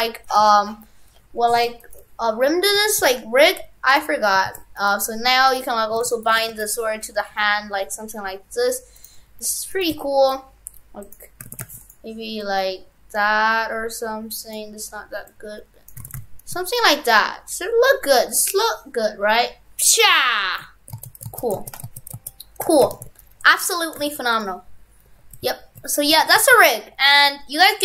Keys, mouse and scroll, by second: 0.3 shift+right click, 1.6 ctrl+Tab, 1.9 right click, 3.1 ctrl+p, 4.5 ctrl+Tab, 4.8 right click, 4.9 right click, 6.0 ctrl+Tab, 6.2 right click, 6.2 right click, 6.4 r, 9.1 right click, 9.9 right click, 9.9 r, 11.5 shift+f, 12.4 click, 16.1 shift+f, 18.3 click, 21.0 ctrl+z, 21.3 ctrl+z, 21.7 ctrl+z, 21.9 ctrl+z, 22.3 ctrl+z, 22.7 shift+f, 23.7 Tab, 24.0 shift+f, 25.1 Tab, 26.3 shift+f, 26.8 a, 27.6 Delete.